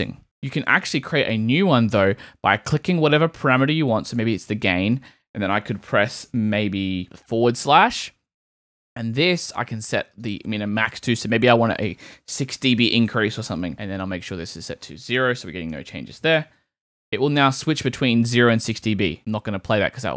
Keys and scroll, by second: 0.2 super+k, 10.9 BackSpace, 12.5 6, 12.7 Return, 13.7 super+k, 15.2 0, 15.7 Return, 16.2 super+Return, 16.4 super+k, 16.8 super+/, 17.4 /.